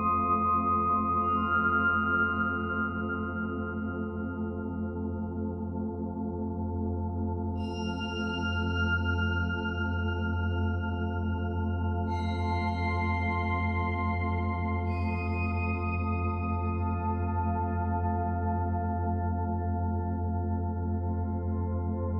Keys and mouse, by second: 2.7 s, 3.2 x, 5.4 click, 6.9 ctrl+alt+click, 7.5 ctrl+click, 8.3 g, 8.7 z, 10.0-11.0 drag, 10.9 typing, 12.7 typing, 13.7 click, 14.9-15.2 typing, 17.9 shift+click, 20.2-21.7 alt+drag.